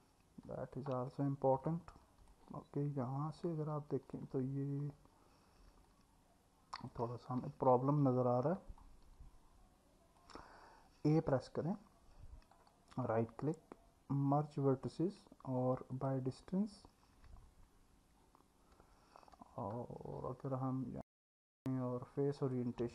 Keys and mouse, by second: 0.5 click, 1.7 alt+middle click, 3.6 alt+middle click, 5.9-6.9 alt+middle drag, 7.6 Tab, 8.8-10.2 middle drag, 11.2 a, 12.6-16.1 right drag, 17.5 Tab, 18.8 Tab, 19.4 Tab, 21.3-22.8 drag.